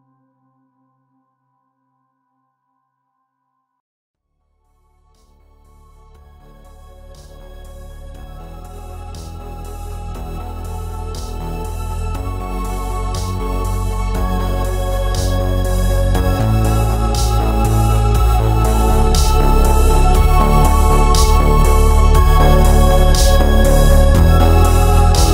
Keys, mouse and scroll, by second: 1.5 click, 2.0 s, 2.7 Escape, 2.9 s, 3.5 Escape, 3.7 click, 3.9 ctrl+z, 4.9 s, 5.9 click, 6.1-9.7 middle drag, 6.7-7.1 scroll down 1, 7.1 shift+z, 8.6 s, 9.7 click, 9.9 shift+d, 13.1 click, 14.0 KP_7, 14.5 shift+z, 14.9 shift+d, 17.4 click, 17.6-19.0 middle drag, 18.0 scroll down 2, 18.7 shift+z, 19.0 scroll down 1, 20.1 ctrl+s, 20.6 middle click, 21.4-22.1 scroll down 2, 21.5 middle click, 22.1 middle click, 23.0-23.3 scroll up 1, 23.3-24.8 middle drag, 24.4 scroll up 1, 24.8 click, 25.1 KP_2.